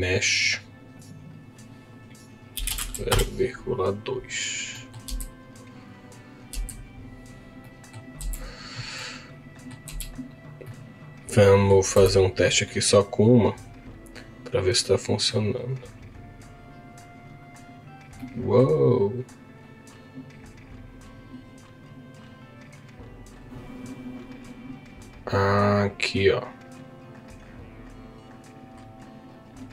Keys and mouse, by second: 1.0-3.1 drag, 7.6 middle click, 8.3 z, 9.0 middle click, 9.8 z, 10.6-11.7 middle drag, 11.9 z, 13.6 click, 14.1 click, 17.4 click, 18.1 middle click, 19.7-23.4 drag.